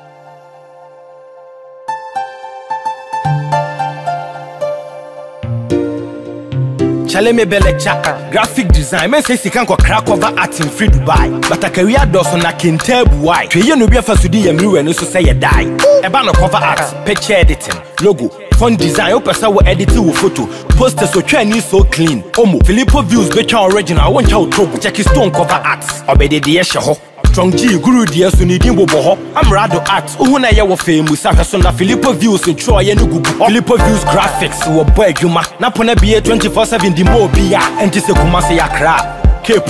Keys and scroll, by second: 18.2 ctrl+t, 26.5 Return.